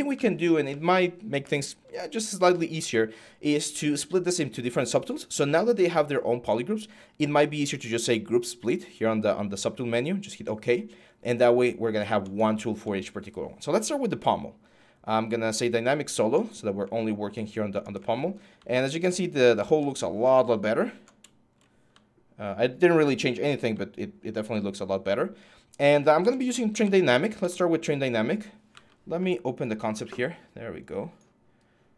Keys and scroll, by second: 25.7-27.1 typing, 27.2 alt+Tab, 28.5 alt+Tab, 29.4 alt+Tab.